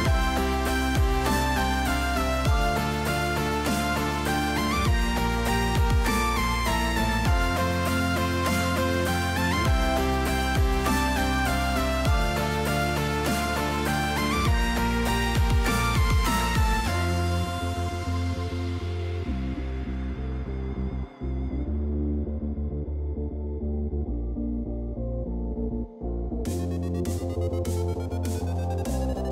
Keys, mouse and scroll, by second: 0.7 click, 1.2 click, 1.8 shift+click, 2.4 g, 8.4 g, 12.2 middle click, 13.4 middle click, 15.0 right click, 16.5 g, 22.7 shift+middle click, 27.0 click, 27.6 click, 28.2 g.